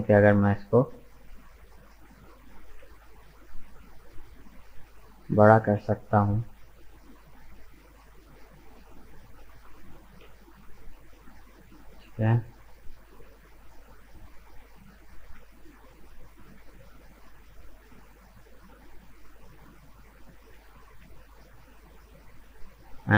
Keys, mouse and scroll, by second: 1.9 ctrl+KP_Add, 2.7 ctrl+z, 4.1 shift+right click, 4.6 shift+right click, 5.0-5.4 scroll down 2, 5.4-6.4 middle drag, 6.4 s, 9.5 g, 14.6 g, 20.5 g.